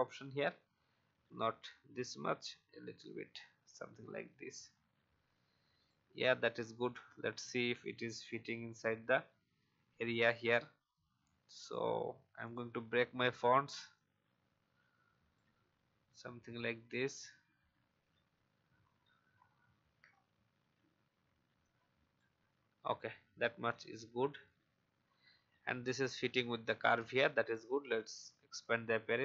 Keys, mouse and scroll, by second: 1.2 shift+scroll up 1, 2.4-4.7 shift+scroll up 1, 5.8 click, 6.7-7.9 typing, 11.5 right click, 12.4 click, 13.9-15.3 shift+drag, 17.2 Left, 17.4 Left, 17.7 Left, 18.0 Left, 18.2 Left, 18.4 Left, 18.6 Left, 18.8 Left, 20.1 alt+scroll up 1, 21.6 shift+click, 22.9 alt+scroll down 1, 24.6 alt+Up, 25.1 alt+Up, 25.6 alt+Up, 27.9 click.